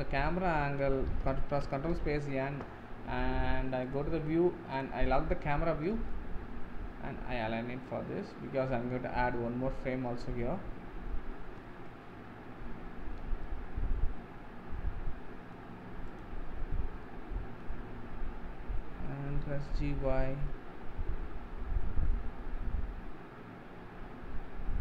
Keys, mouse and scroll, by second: 1.5 ctrl+space, 1.9 n, 4.7 click, 5.3-5.9 scroll up 3, 6.1-9.3 shift+middle drag, 9.8-16.2 middle drag, 16.2 click, 16.7-17.0 scroll down 2, 17.0-18.1 middle drag, 18.1-19.3 scroll up 1, 19.5 g.